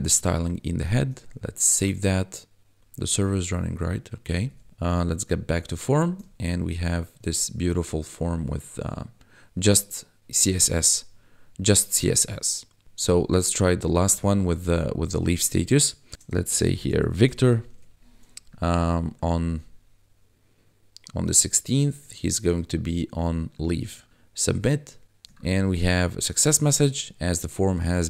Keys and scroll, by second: 0.0 ctrl+v, 4.6 Tab, 16.5 shift+v, 16.8 i, 16.9 c, 17.2 o, 17.7 Tab.